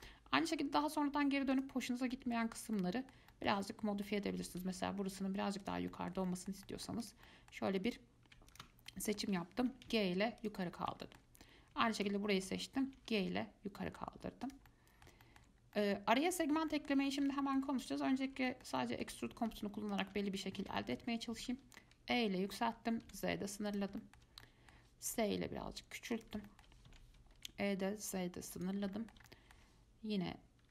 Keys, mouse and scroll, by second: 1.7 alt+click, 2.3 alt+middle click, 3.0-4.5 middle drag, 4.5 g, 6.1-7.2 shift+middle drag, 7.2 click, 7.5 middle click, 8.1 click, 8.7 alt+click, 9.1-9.8 middle drag, 9.8 g, 10.8-12.2 middle drag, 12.2 alt+click, 13.1 g, 14.9 middle click, 15.8 scroll down 1, 15.9-18.0 middle drag, 18.0 click, 18.4-18.7 scroll up 1, 18.7 shift+middle click, 19.4-20.1 scroll up 1, 20.1 alt+click, 20.7 scroll down 1, 21.0 shift+middle click, 21.5 e, 24.2-25.3 shift+middle drag, 25.3 s, 26.7 shift+middle click, 27.1 e, 29.2-30.7 shift+middle drag.